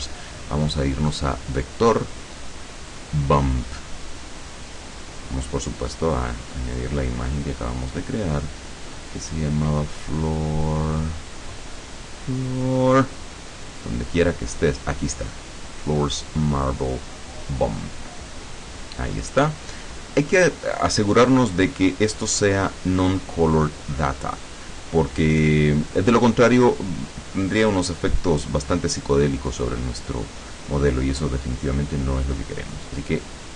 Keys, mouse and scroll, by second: 3.1 click, 4.7 click, 5.7 click, 8.1 click, 16.6 click, 18.3 click, 22.3 click, 24.7 click, 28.8-33.5 drag.